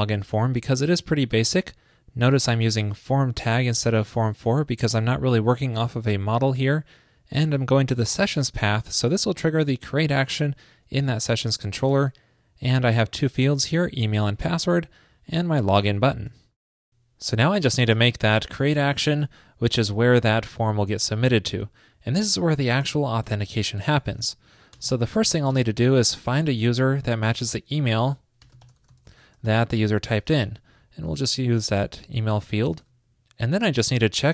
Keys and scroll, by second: 16.4 super+s, 30.4 ctrl+p, 32.0 super+Right, 32.9 super+s.